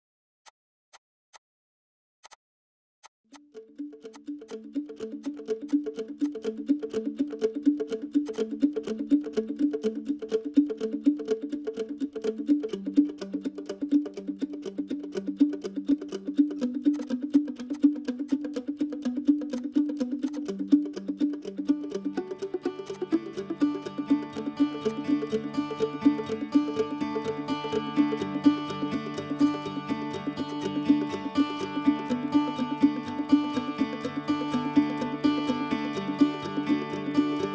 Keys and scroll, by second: 1.8 [, 3.4 p, 6.4 Escape, 17.2 p, 18.2 e, 20.2 Escape, 20.2 Escape, 23.2 p, 27.5-28.5 typing, 30.0-32.4 typing.